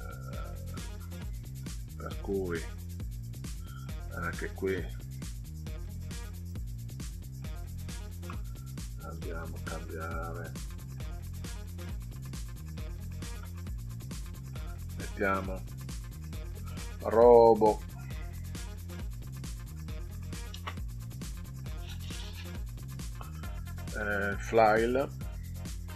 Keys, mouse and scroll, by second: 1.0 scroll up 2, 3.4 click, 5.1-6.7 drag, 9.1 click, 10.2 click, 12.0 click, 12.8 click, 14.1 click, 14.4 click, 17.6 shift+r, 18.3 o, 19.6 b, 20.1 o, 20.5 space, 25.8 shift+f.